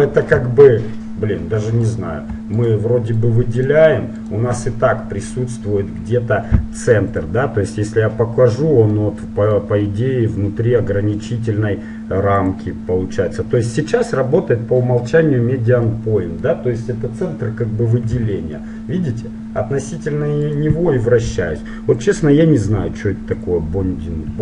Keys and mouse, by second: 2.0-6.1 right drag, 4.8-6.5 middle drag, 7.3-9.1 drag, 9.1-11.1 middle drag, 12.4-14.3 drag, 15.9-18.3 middle drag, 18.3 r, 22.2-23.9 drag.